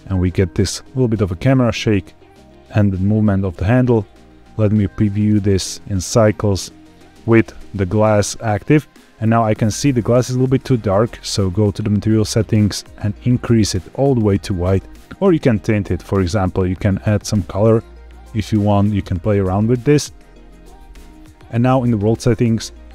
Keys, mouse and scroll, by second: 3.9 z, 5.2 space, 6.9 alt+h, 7.8 click, 11.4 click, 12.2 click, 15.4 click, 19.2 ctrl+z, 21.7 click.